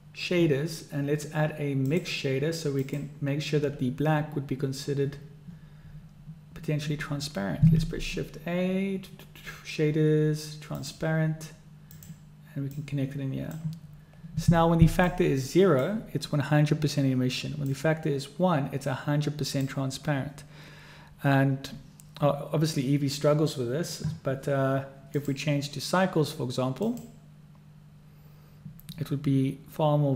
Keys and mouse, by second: 7.9 shift+a, 13.0 click, 15.2 click, 17.8-19.8 drag, 25.3-27.2 drag.